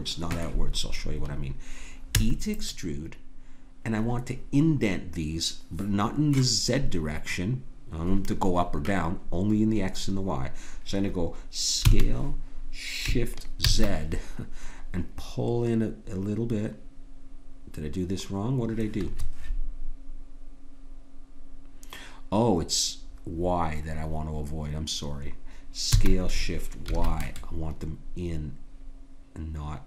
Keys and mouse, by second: 2.1 e, 11.8 s, 25.9 s.